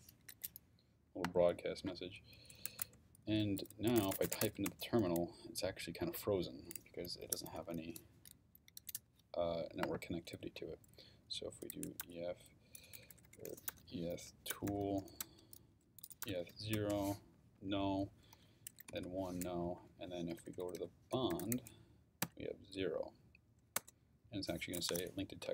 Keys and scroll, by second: 2.4-4.9 typing, 11.4-16.8 typing, 17.5 Up, 18.3 BackSpace, 18.7 l, 18.9 Return, 19.6 Up, 20.3-22.2 typing, 23.7 Return.